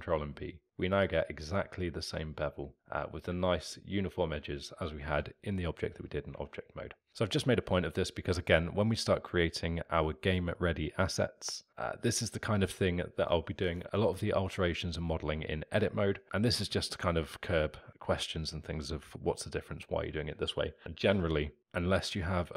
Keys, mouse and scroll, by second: 3.7-6.4 alt+middle drag, 6.4 Tab.